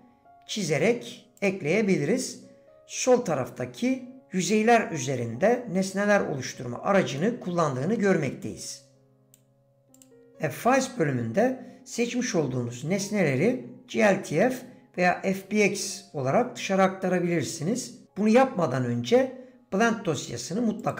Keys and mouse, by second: 7.2-7.9 middle drag, 9.2-11.3 drag.